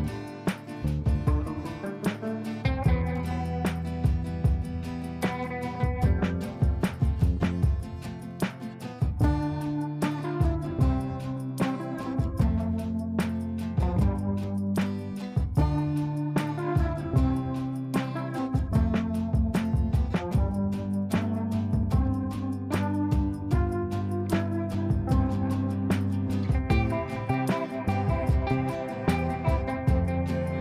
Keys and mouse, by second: 3.8 click, 4.4 F3, 6.7-7.6 drag, 13.7 alt+click, 14.9 shift+Page_Up, 16.7 click, 18.0 shift+click, 18.7 right click, 19.8 click, 19.8 click, 20.6 right click, 21.7 click, 25.9 alt+click, 27.0 shift+Page_Down, 28.0 click.